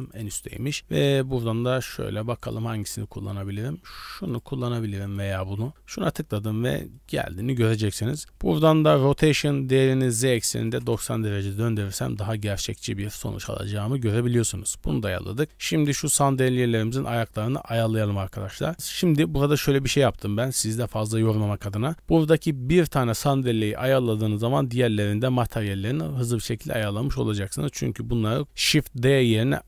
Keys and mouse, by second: 6.6-7.2 middle drag, 9.7-10.8 drag, 12.1 middle click, 12.7 shift+middle click, 15.6 KP_Decimal, 16.4-17.2 middle drag, 17.7-18.4 middle drag, 19.1 shift+middle click, 20.0 middle click, 21.1 shift+middle drag, 26.8 shift+middle click, 27.1-27.6 middle drag.